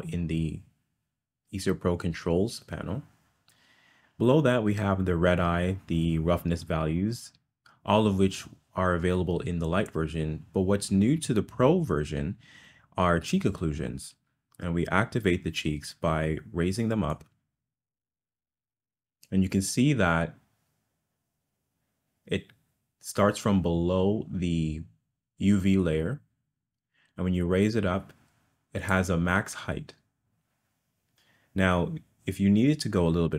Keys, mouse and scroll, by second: 17.2-28.9 drag.